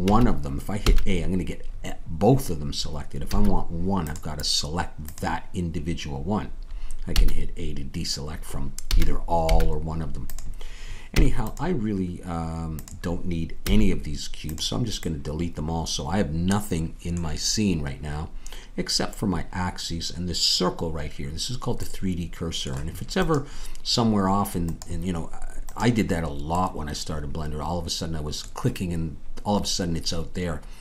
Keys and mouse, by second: 0.1 a, 0.8 a, 6.4 click, 7.1 a, 8.9 a, 11.1 x, 13.6 x.